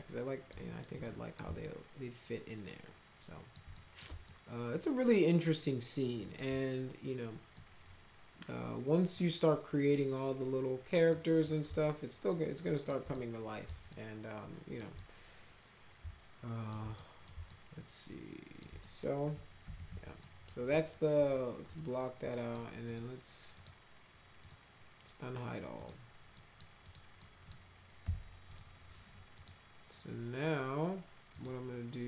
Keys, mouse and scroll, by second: 1.0-1.3 middle drag, 1.6-3.5 alt+middle drag, 3.7 middle click, 4.2-6.3 alt+middle drag, 7.5-9.1 middle drag, 11.1 middle click, 11.7-12.8 alt+middle drag, 13.1 middle click, 13.9 alt+middle click, 14.9-16.6 middle drag, 16.9 middle click, 17.4-18.6 alt+middle drag, 18.8 middle click, 19.3-20.3 typing, 20.2 middle click, 20.8 middle click, 21.7 middle click, 22.3 middle click, 22.8 right click, 23.5 click, 24.4 right click, 25.7 click, 26.3 middle click, 26.8 click, 27.1 middle click, 28.0 F4, 28.5 click, 29.3 click, 31.3 click.